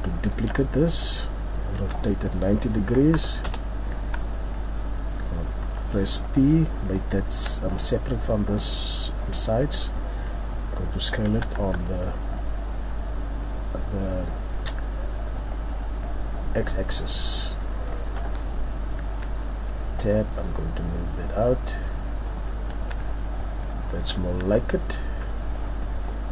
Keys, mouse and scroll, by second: 0.3 shift+d, 1.0 right click, 1.8 r, 3.9 Tab, 8.2 right click, 9.2 right click, 16.9 middle click, 18.2 KP_7, 19.0 Tab, 20.0 click, 22.2 middle click, 22.6 Tab, 23.1-23.8 scroll down 3, 23.4 middle click, 23.4-23.8 scroll up 1, 24.2 middle click, 24.3-25.0 scroll up 3, 24.4 z, 25.2-25.6 scroll down 3, 25.6-26.3 scroll up 4, 25.6 middle click.